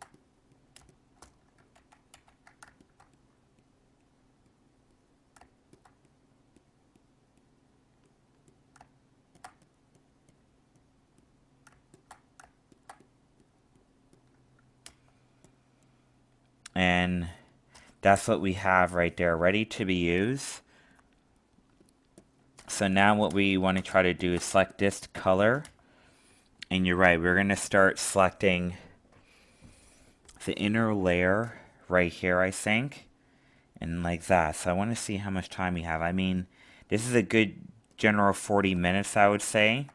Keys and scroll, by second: 1.7 ctrl+z, 39.1 alt+space.